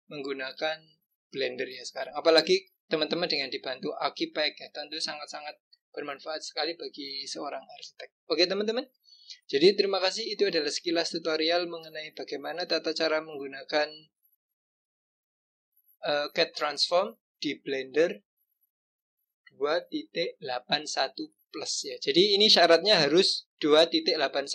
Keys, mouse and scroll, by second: 8.8 click, 9.3-10.7 scroll down 1, 10.7 click.